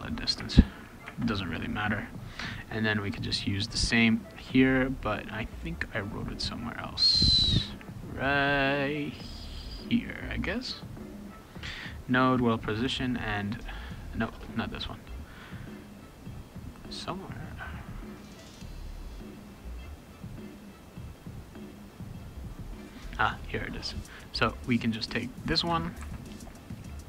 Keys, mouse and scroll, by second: 0.3 space, 0.6 =, 1.0 space, 3.3 click, 9.3-14.2 drag, 20.3 click, 20.5 click, 24.4-25.6 drag, 26.0 ctrl+c.